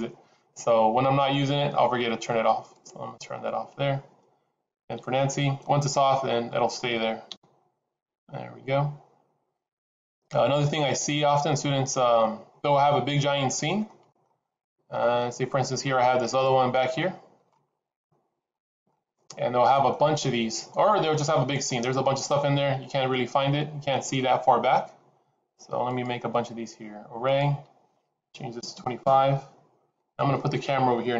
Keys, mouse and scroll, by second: 2.8 click, 4.8 n, 5.9 middle click, 7.2 KP_0, 11.7-12.2 scroll down 2, 13.3-13.8 scroll down 4, 13.8 middle click, 14.4-14.9 scroll down 2, 14.9 shift+middle click, 16.9 click, 16.9 shift+middle click, 17.5-17.9 scroll up 3, 17.9 middle click, 18.8 shift+middle click, 21.1 shift+middle click, 22.1-22.6 scroll up 4, 25.8 click, 27.2 click.